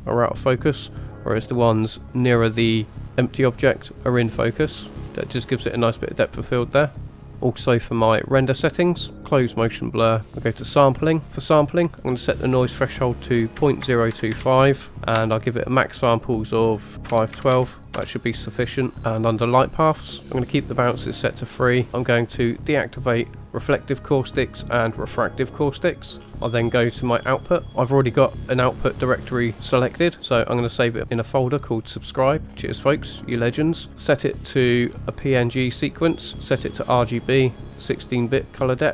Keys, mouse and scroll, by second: 7.1 click, 8.6 click, 9.4 click, 10.6 click, 11.4-18.1 drag, 18.9-19.4 scroll down 1, 19.4 click, 19.9-21.8 scroll down 2, 21.8 scroll down 1, 21.9 click, 23.6 click, 25.1 click, 26.2 scroll up 2, 27.4 click, 27.6-28.0 scroll up 1, 33.9 scroll down 2, 34.2 click.